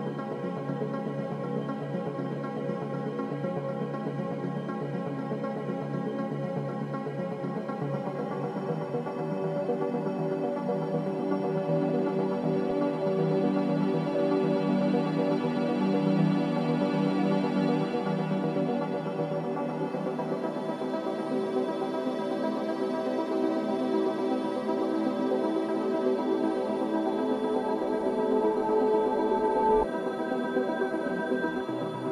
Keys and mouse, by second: 0.9 ctrl+s, 2.6 `, 3.5 `, 5.4 F4, 6.1 click, 6.7 Tab, 7.3 Tab, 8.1 ctrl+s, 10.8 Tab, 12.5 Tab, 13.3 Tab, 13.7 Tab, 14.6 click, 15.6 shift+h, 16.2-18.3 middle drag, 18.5-18.8 middle drag, 18.9 middle drag, 19.5-21.7 middle drag, 23.0 `, 24.3 ctrl+s, 27.1 click, 27.9 click, 28.8 ctrl+s.